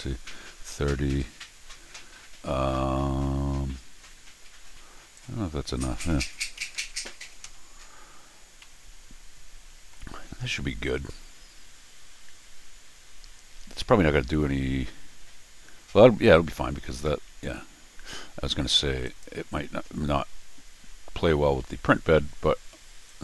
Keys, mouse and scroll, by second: 5.1 click, 8.6-9.9 middle drag, 19.0 click, 21.6 Escape, 23.1-23.2 drag.